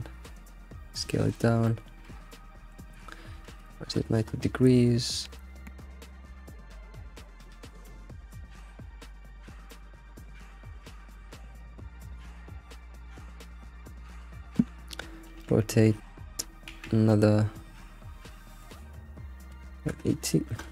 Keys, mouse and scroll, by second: 0.1-0.5 scroll down 3, 0.5 s, 1.7-2.3 alt+middle drag, 2.3-2.6 scroll up 3, 2.6 r, 7.4 alt+middle click, 7.8 scroll up 4, 8.1-9.1 shift+middle drag, 9.1 F6, 9.6 F6, 10.6 alt+x, 12.0-15.0 middle drag, 15.4 r.